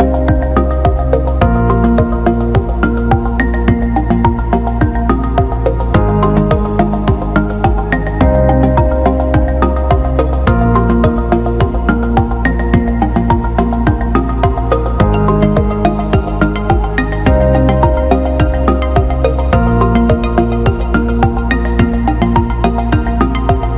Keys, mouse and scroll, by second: 6.0 alt+middle click, 6.7 alt+shift+middle drag, 7.9 Tab, 8.9-10.1 drag, 10.1 l, 11.4 click, 13.9 Tab, 15.7 click, 16.0-16.3 alt+middle drag, 16.6 alt+shift+middle click, 16.9 alt+shift+middle drag, 18.8 click, 19.3-20.3 alt+middle drag, 21.3 click, 22.6 click.